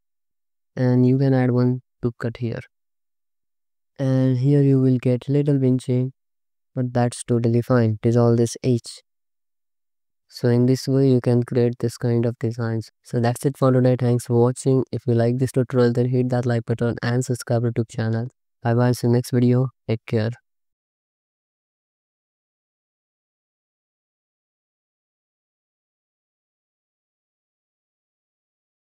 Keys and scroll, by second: 0.3 Tab, 1.4 ctrl+r, 2.5 Tab, 3.4 alt+shift+z, 4.4 Tab, 6.2 ctrl+x, 6.8 Tab, 8.9 alt+shift+z, 10.0 ctrl+s, 10.5 alt+shift+z, 17.1 alt+shift+z, 18.2 alt+shift+z, 19.5 ctrl+s.